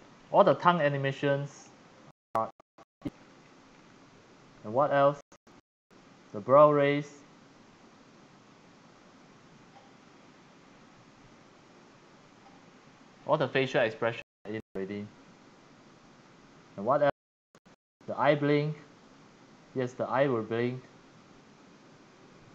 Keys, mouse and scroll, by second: 1.9-2.5 scroll down 3, 2.9-3.7 scroll down 10, 3.7-4.6 scroll up 7, 4.6-5.9 scroll down 2, 5.9-7.0 scroll down 1, 7.0-7.7 scroll down 1, 8.9 middle click, 10.2-11.6 scroll up 1, 16.2 click, 16.4-16.7 scroll, 17.9 click, 18.5 click.